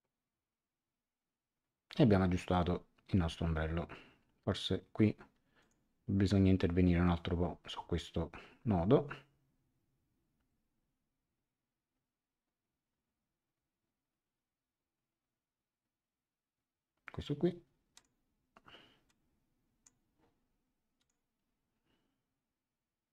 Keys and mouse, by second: 5.6 click, 17.9 click, 19.0 click, 20.9 click.